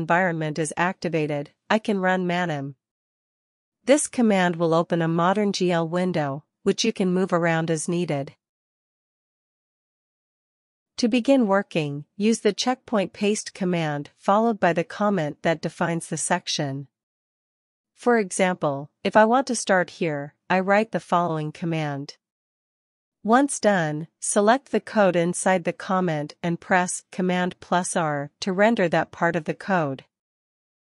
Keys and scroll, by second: 0.0-0.2 typing, 2.4-4.9 typing, 16.3 super+c, 16.4 super+c, 16.6 super+c, 17.4-19.4 typing, 20.6 space, 21.2 super+v, 22.6 Return, 30.7 super+r.